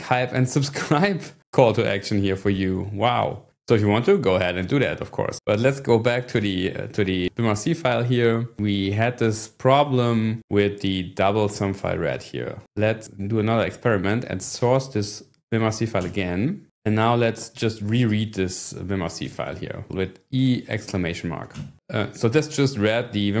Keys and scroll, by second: 6.3 ctrl+6, 7.2-7.9 typing, 13.9-15.1 typing, 16.0 Return, 16.9 :, 18.1 e, 19.2 1, 19.9 BackSpace, 19.9 !, 21.6 Return.